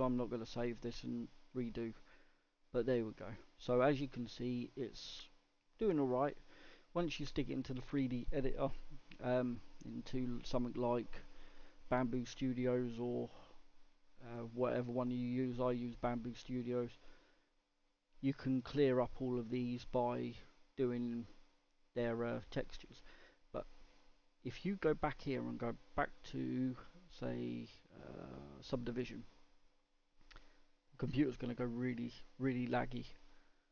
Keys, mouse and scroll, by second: 1.7-2.2 scroll up 1, 2.2-3.5 middle drag, 3.5-3.9 scroll down 1, 3.9-4.5 scroll up 4, 4.5-9.2 middle drag, 9.2-9.8 scroll down 1, 9.8-12.6 scroll down 1, 12.6-16.1 middle drag, 16.1 scroll up 1, 16.4 middle click, 17.1-18.1 scroll down 1, 18.1-20.2 scroll up 1, 20.2-21.1 scroll down 1, 21.1-23.0 middle drag, 23.0-23.5 scroll down 2, 23.5-33.7 middle drag.